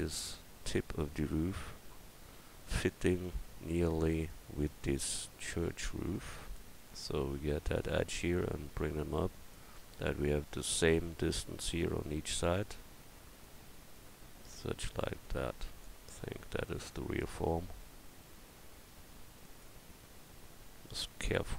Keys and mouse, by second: 3.3 Tab, 6.6-9.5 drag, 7.6-10.2 right drag, 9.7 click, 11.7 Tab, 13.4-15.8 drag, 17.3 s.